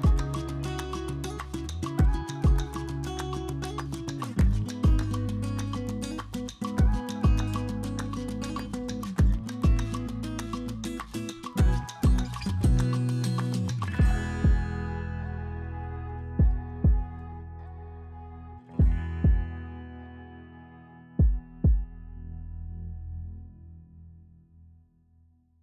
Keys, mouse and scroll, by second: 1.2 click, 2.1 click, 3.2 click, 6.7 Tab, 6.9 1, 7.4 click, 8.1 alt+s, 10.1 Tab, 11.3-12.0 middle drag, 12.4 KP_2, 14.1 KP_3, 15.0 g, 15.5-16.6 shift+middle drag, 16.9 middle drag, 17.5 middle drag, 18.0 middle drag, 19.2-20.4 shift+middle drag, 20.9 KP_3, 23.5 Tab, 24.2 click, 25.1 alt+s.